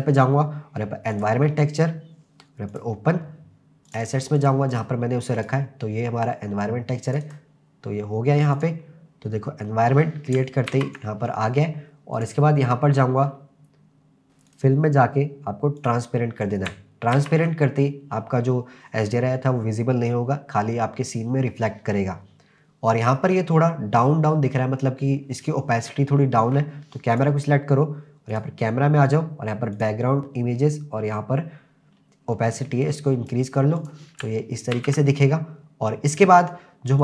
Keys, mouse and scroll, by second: 2.7 click, 8.6 click, 9.2-10.2 scroll up 2, 10.2 scroll down 1, 10.8 ctrl+s, 12.2 click, 13.2-13.8 scroll down 2, 14.5 click, 14.8-15.2 scroll down 2, 15.8 click, 17.2 ctrl+s, 27.1 click, 28.3 click, 29.8 click, 30.6-32.5 scroll down 1, 32.5 click, 32.5 scroll down 2, 33.8 click, 34.8 ctrl+s, 35.5-36.9 scroll up 1.